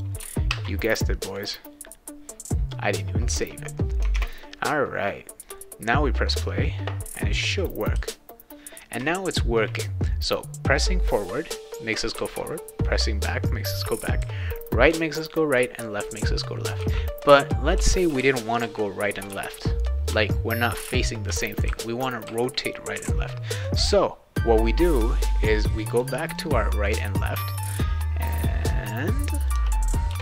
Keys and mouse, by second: 0.5 ctrl+s, 1.3 click, 4.1 alt+Tab, 5.4 click, 7.6 click, 7.9 w, 9.0 shift+w, 12.1 s, 14.2 d, 14.9 a, 16.8-22.2 typing, 23.7 click, 25.8 click, 26.3-27.5 drag, 28.4 click, 29.5 BackSpace, 30.1 Return.